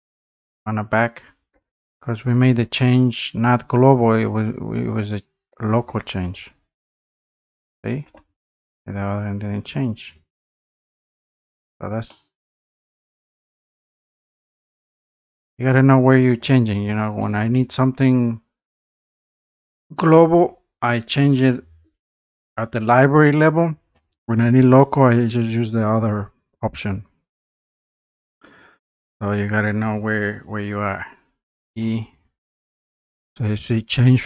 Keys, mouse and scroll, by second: 1.5 click, 2.3 click, 2.3 scroll, 3.2 click, 3.9 click, 4.3-4.7 scroll, 4.7 scroll down 9, 5.6 middle click, 5.9-6.7 scroll up 7, 8.0 click, 8.8 click, 9.3 scroll down 1, 9.8 scroll down 4, 10.2-10.7 scroll up 3, 11.1-11.5 scroll down 2, 12.5 middle click, 14.1 click, 14.5-14.9 scroll down 2, 15.3 click, 15.7 scroll up 1, 16.1 scroll down 1, 16.5 scroll up 1, 17.4 middle click, 19.1 click, 20.3 click, 21.1 click, 21.4 scroll down 2, 21.9-22.7 scroll up 5, 23.0 scroll up 1, 28.2 click, 30.4 click, 31.5 click.